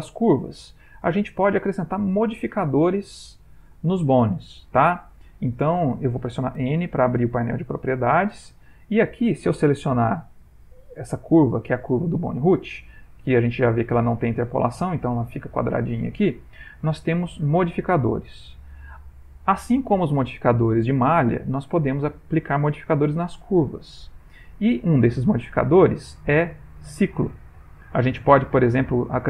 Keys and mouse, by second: 0.4 middle click, 10.0 click, 11.0 g, 17.5 click, 25.2 click.